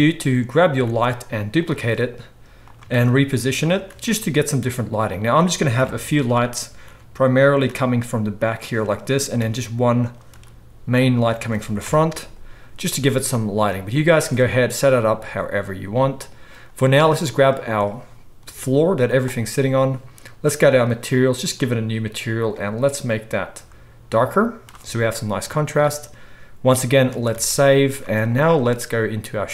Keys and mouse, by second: 0.8 shift+d, 1.8 r, 2.9 shift+d, 4.8 r, 5.7 KP_7, 6.1 middle click, 6.8 shift+d, 7.6 r, 9.0 middle drag, 9.4 shift+d, 10.3 r, 10.8-13.3 middle drag, 11.8 KP_0, 13.5-17.3 middle drag, 17.3 click, 17.8-20.6 middle drag, 18.4 g, 20.6 click, 20.8 middle click, 21.4-22.7 drag, 22.7-24.0 middle drag, 27.2 ctrl+s, 27.4 ctrl+s, 28.0-29.5 middle drag, 28.0 z.